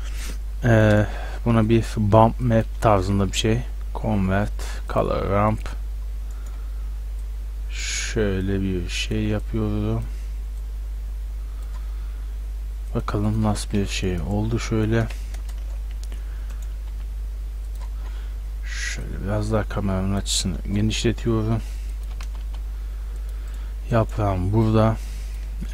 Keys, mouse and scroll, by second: 1.7 click, 2.7-3.0 middle drag, 3.0 shift+a, 6.1 click, 6.2 middle click, 6.5-12.5 drag, 12.9-14.4 drag, 14.4 middle drag, 14.7-15.5 drag, 15.5 ctrl+alt+KP_0, 16.9 g, 19.1-20.9 drag, 21.1 g, 21.7 g, 22.1 g, 23.5-24.0 drag.